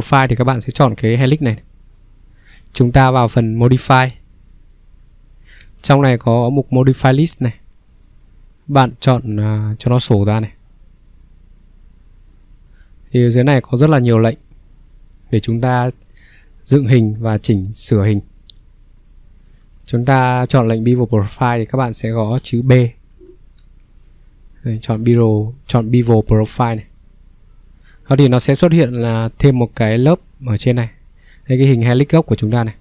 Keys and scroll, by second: 5.6 ctrl+3, 6.8 ctrl+3, 10.1 Escape, 23.1-23.6 typing.